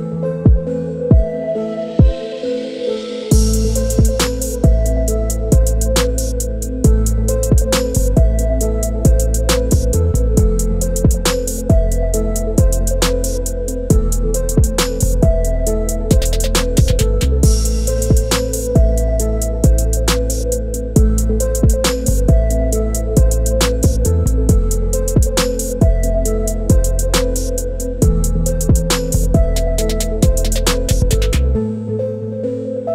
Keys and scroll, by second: 0.0-2.5 typing, 5.6-6.6 typing, 9.7-10.6 typing, 14.5-16.8 typing, 21.2-22.9 typing, 23.2 Return.